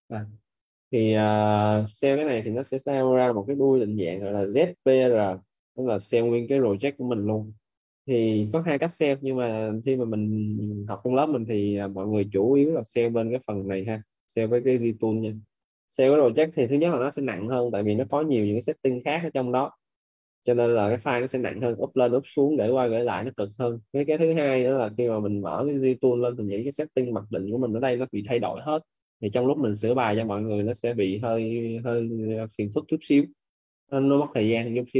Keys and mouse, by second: 2.1 click, 9.3 click.